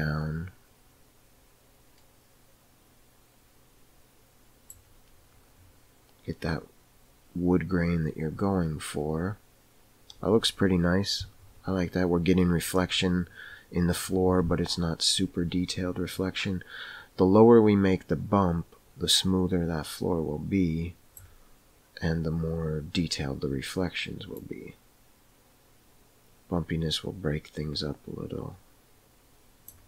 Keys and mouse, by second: 16.1-21.1 drag, 24.3-29.8 drag.